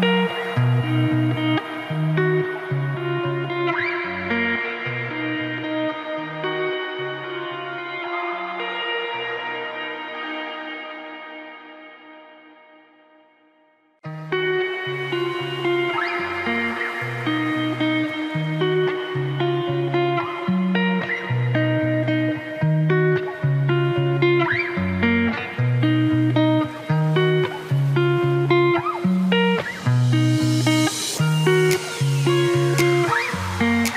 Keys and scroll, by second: 14.8 ctrl+t, 23.5 ctrl+t.